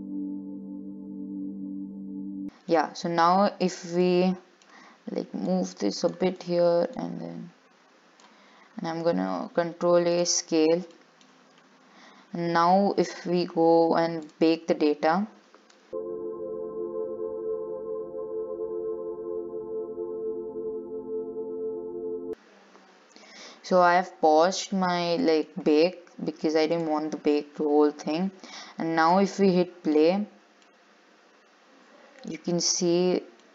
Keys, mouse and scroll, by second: 1.3 click, 2.3 ctrl+s, 2.6-3.8 middle drag, 3.8 click, 4.2-5.7 middle drag, 5.7 click, 7.2 click, 9.3 ctrl+a, 11.1-13.3 middle drag, 13.3-14.5 scroll down 7, 14.5-22.6 drag, 23.9 scroll up 2, 24.1-25.3 middle drag, 25.3 scroll up 1, 25.4-26.9 shift+middle drag, 26.9-31.2 drag, 31.2-33.5 middle drag.